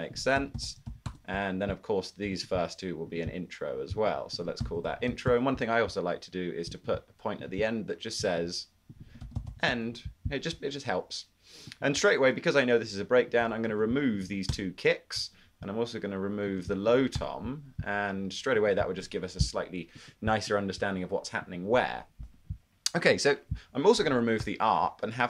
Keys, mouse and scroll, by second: 0.3-2.1 typing, 4.6-5.8 typing, 9.0-10.0 typing, 13.3-14.5 typing, 17.2 BackSpace, 24.5 BackSpace.